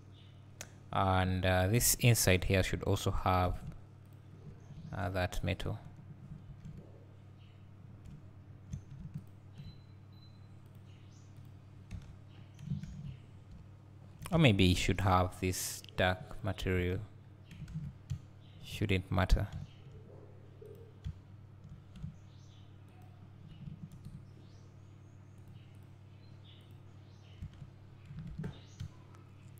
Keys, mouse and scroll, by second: 2.8 scroll down 1, 4.2 ctrl+click, 5.0 ctrl+KP_Add, 6.6 ctrl+z, 9.3 shift+click, 10.7-14.7 drag, 12.0 Tab, 12.3-13.5 scroll down 1, 13.6 `, 14.5 Tab, 14.7-15.7 scroll up 2, 15.7 click, 16.9 Tab, 17.2-18.1 scroll down 2, 18.1 `, 18.9-19.3 scroll up 2, 19.3 Tab, 19.6 `, 20.4 click, 21.1 `, 23.9 ctrl+KP_Add, 25.4-27.5 drag, 27.5 Tab, 27.9-28.8 scroll down 2, 28.8 `.